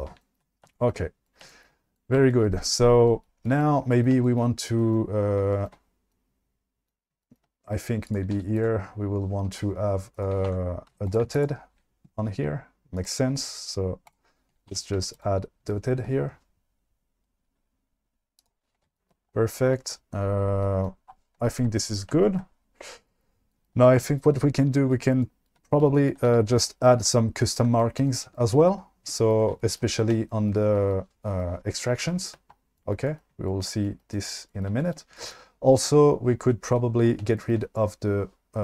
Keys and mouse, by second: 4.1 shift+middle drag, 5.4-5.7 shift+middle drag, 7.1 shift+middle click, 8.1 click, 8.3 q, 10.1 click, 10.6 Tab, 10.9 2, 11.1 click, 11.3 alt+click, 14.2 click, 14.8 Tab, 15.0 q, 18.4 click.